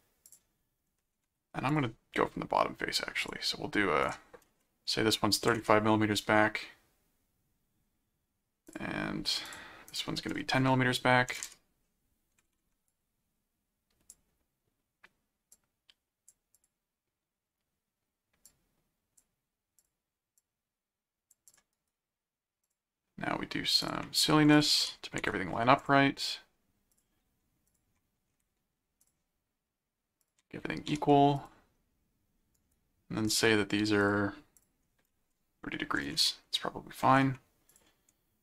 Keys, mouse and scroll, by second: 0.2 click, 1.7 click, 3.2 click, 4.0 click, 8.7 click, 9.4 click, 12.8 click, 15.5 click, 16.5 click, 18.5 click, 19.8 click, 20.5 click, 21.5 click, 21.7 right click, 22.6 click, 23.8 click, 24.5 alt+click, 24.8 alt+c, 25.2 alt+h, 25.8 click, 26.9 ctrl+click, 27.6 ctrl+click, 29.0 ctrl+click, 30.2 ctrl+click, 30.8 alt+q, 31.4 click, 32.5 right click, 33.3 click, 34.0 click, 37.7 ctrl+click.